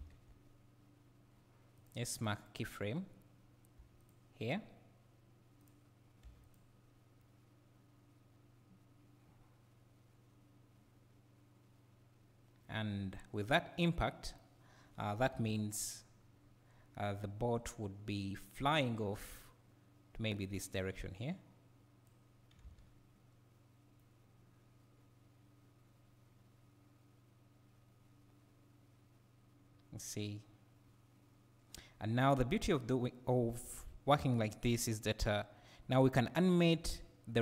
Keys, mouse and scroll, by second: 1.9 click, 3.8 g, 4.1 click, 5.6 click, 6.2 g, 6.5 click, 7.2-19.4 right drag, 15.3 KP_7, 16.0 scroll down 1, 19.4-24.0 drag, 24.0-37.4 right drag, 33.7 space.